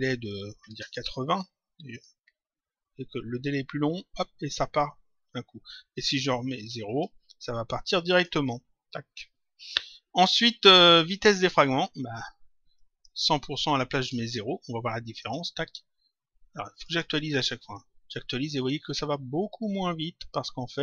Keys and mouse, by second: 0.9 click, 5.8 click, 8.1 click, 10.8 click, 12.7 click, 14.2 click, 16.8 click.